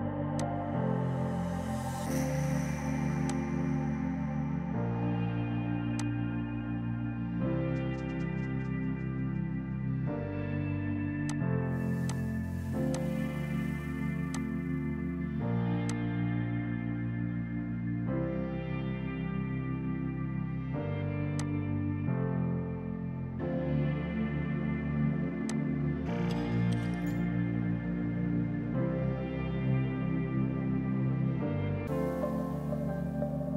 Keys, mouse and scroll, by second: 2.2 space, 3.4 click, 4.0 Delete, 6.0 click, 11.3 click, 11.3 typing, 15.2 space, 16.0 click, 17.3 ctrl+z, 19.7 Delete, 21.4 click, 25.6 click.